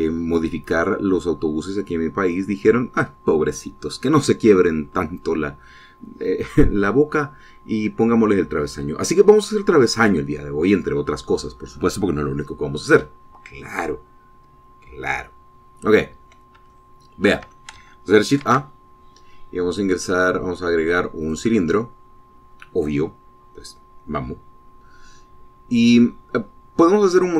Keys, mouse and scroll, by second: 17.4 shift+middle click, 19.1 shift+a, 21.9 click.